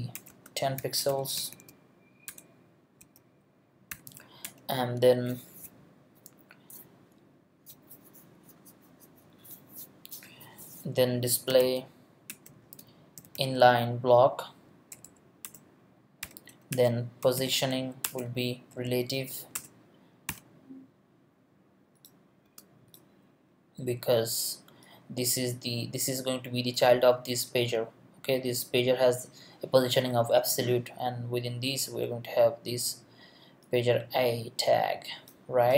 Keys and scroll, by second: 0.0-3.9 typing, 0.1 Return, 4.4 Return, 11.1-13.8 typing, 12.3 Return, 14.9 Down, 15.4 Return, 16.2-17.9 typing, 16.7 Return, 18.0 Return, 18.7 Down, 19.5 Return, 20.3 ;, 22.4 space.